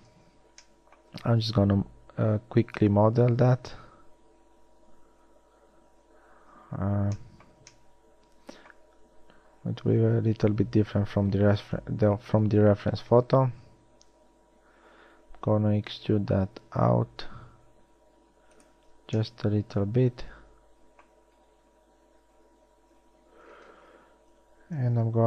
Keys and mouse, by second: 5.4 shift+a, 12.0 KP_1, 14.1 e, 25.1 shift+a.